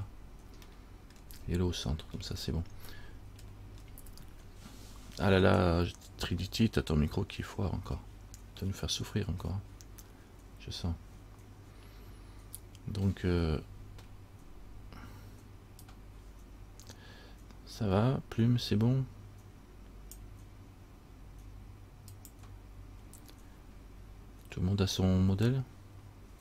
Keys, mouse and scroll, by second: 0.9 shift+middle click, 1.6-2.7 scroll up 3, 3.7 shift+middle click, 3.7 shift+scroll up 1, 4.0-6.9 shift+scroll down 1.